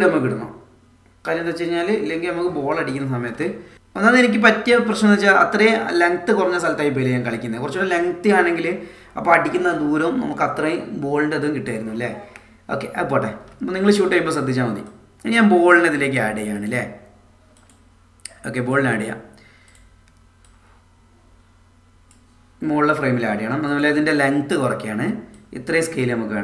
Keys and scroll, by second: 2.2 space.